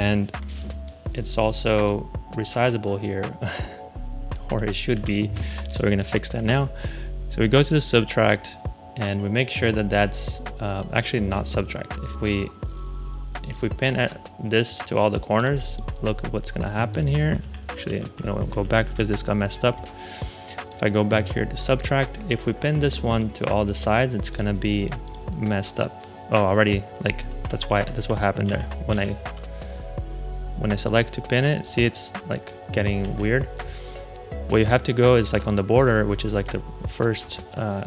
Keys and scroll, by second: 4.8 super+z, 17.3 super+z, 27.6 super+z, 32.9 super+z.